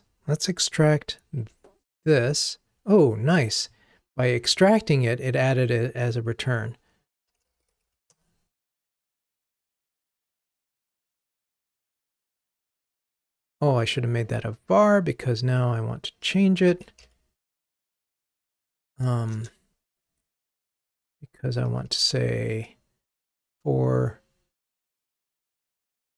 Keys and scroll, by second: 1.3 alt+super+v, 9.0 ctrl+r, 18.2 Escape.